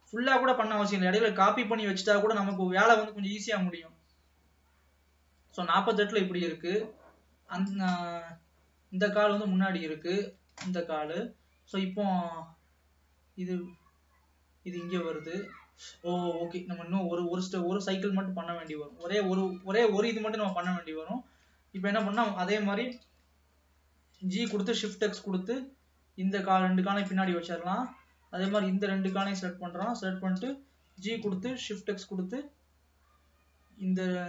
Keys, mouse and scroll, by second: 0.4-1.4 scroll down 2, 1.4-1.8 scroll up 4, 1.8 middle click, 2.8-5.7 drag, 8.2-11.2 middle drag, 11.2 ctrl+s, 13.0-15.0 drag, 19.3 middle click, 20.1 ctrl+s, 20.6 click, 22.2 shift+click, 23.1 KP_3, 24.5 g, 27.5-28.6 middle drag, 28.6 click, 29.2 shift+click, 30.6 KP_3, 31.1 g.